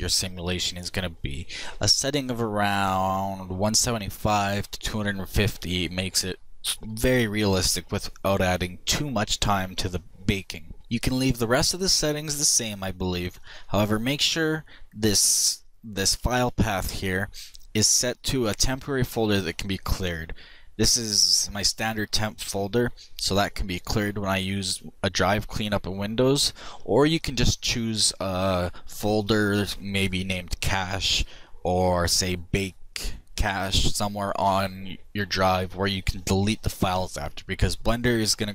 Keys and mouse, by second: 12.6-35.6 drag.